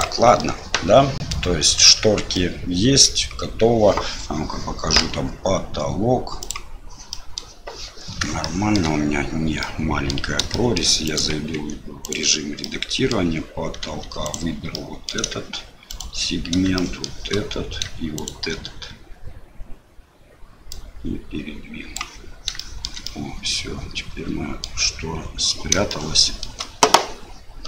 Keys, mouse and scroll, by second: 0.0-1.3 middle drag, 2.3 middle click, 6.4 click, 7.1 middle click, 8.4 shift+middle click, 9.6 middle click, 10.5 shift+middle click, 11.0 click, 11.5 Tab, 12.0 click, 12.6 middle click, 13.8 2, 14.2 click, 14.7 click, 15.9 shift+click, 16.7 shift+middle click, 18.1 shift+click, 20.7-21.9 drag, 22.7 shift+middle click, 23.2-24.6 middle drag, 25.9 shift+middle click.